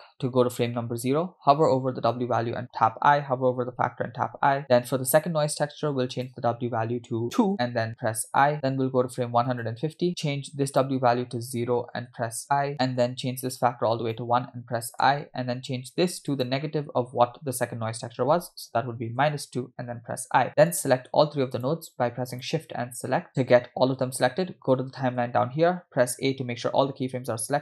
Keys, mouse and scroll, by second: 3.0 i, 4.2 i, 4.6 middle click, 6.1-7.5 drag, 8.3 i, 9.6 click, 10.7-12.0 drag, 12.7 middle click, 12.7 i, 13.6 click, 15.5 i, 16.3-19.2 drag, 20.0 i, 20.7 click, 21.6 shift+click, 22.4 shift+click, 22.8-23.2 scroll down 2, 26.2 a.